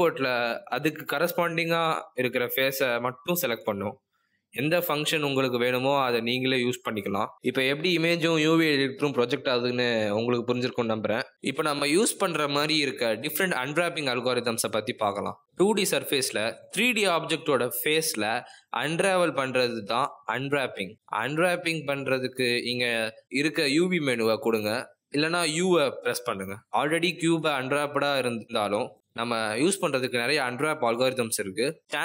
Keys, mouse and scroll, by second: 1.8 click, 20.6 click.